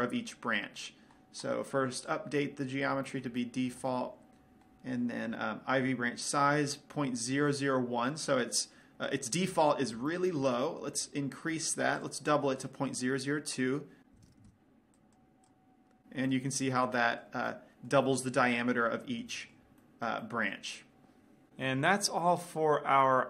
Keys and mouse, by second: 3.1-4.4 drag, 4.4-10.7 middle drag, 11.2-12.6 middle drag, 12.6-14.3 drag, 14.5 KP_0, 15.2-17.0 drag, 17.0-18.1 middle drag, 18.5 middle click, 19.8-21.5 middle drag, 22.3-23.2 middle drag.